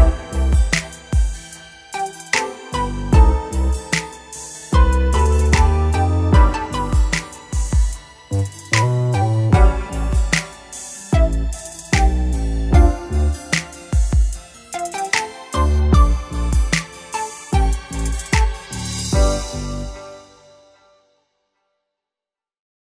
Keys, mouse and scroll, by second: 6.1 l, 6.8 l, 7.7 l, 8.7-10.6 drag, 9.4 Tab, 10.8-12.5 drag, 13.2-15.0 middle drag, 16.9-18.7 middle drag.